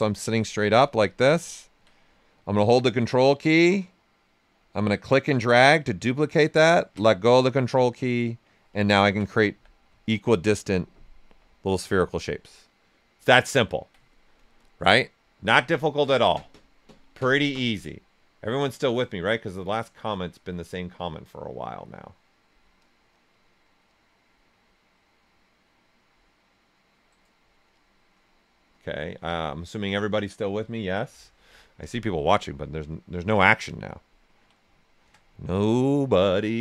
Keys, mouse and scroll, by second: 0.8-4.7 ctrl+right drag, 4.7-8.8 ctrl+drag, 9.5 q, 9.9 ctrl+right click, 11.0 right click, 13.1 typing, 13.2-16.4 ctrl+right drag, 18.4 click, 18.4 typing, 27.0 click, 28.1-28.9 scroll down 1, 31.8 click, 33.1 alt+right click.